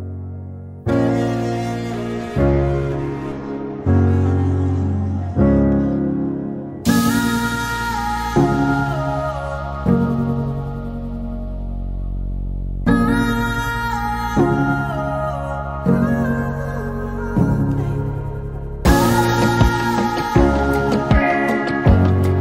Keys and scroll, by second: 3.0 t, 4.8-6.3 typing, 7.8 r, 8.8-9.5 typing, 11.4 t, 12.5-16.0 typing.